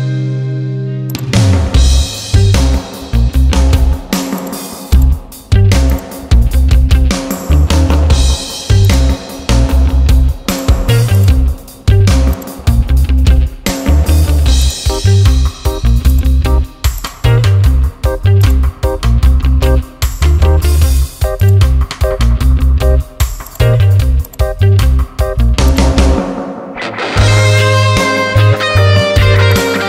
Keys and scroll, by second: 7.3 [, 27.1 ].